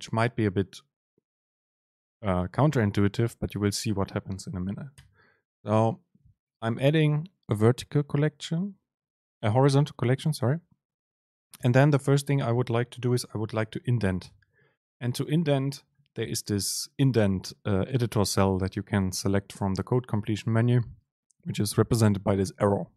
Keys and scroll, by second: 11.8 super+space.